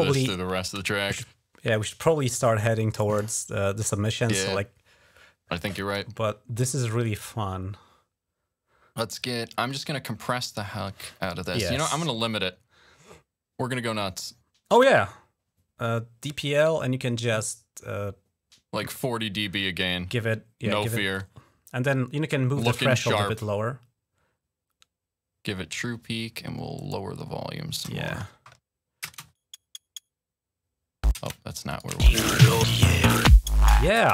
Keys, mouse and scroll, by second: 1.4-1.9 scroll down 2, 3.0 click, 8.6 click, 9.5 right click, 15.9 click, 17.2 click, 17.4 click, 20.5-22.4 drag, 24.9 click, 26.6-27.6 drag, 28.8-30.2 drag, 28.9 space, 31.0 space, 31.5 click, 31.8 space, 33.8 space.